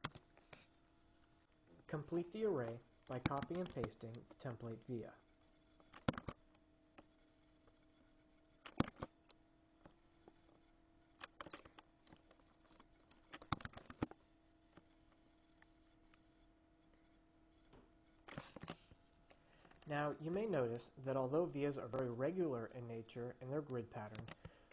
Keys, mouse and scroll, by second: 0.3 s, 2.9-3.8 drag, 3.6 ctrl+c, 3.9 ctrl+v, 4.8-6.6 drag, 6.4 ctrl+v, 7.2-9.3 drag, 9.0 ctrl+v, 10.1-12.2 drag, 12.4-14.0 drag, 13.8 ctrl+c, 14.1 ctrl+v, 15.0-19.4 drag, 24.4 click.